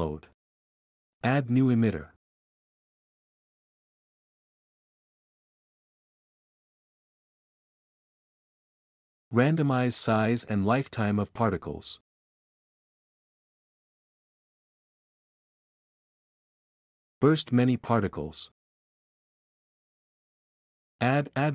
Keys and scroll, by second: 13.0-13.9 typing, 18.9-19.8 typing.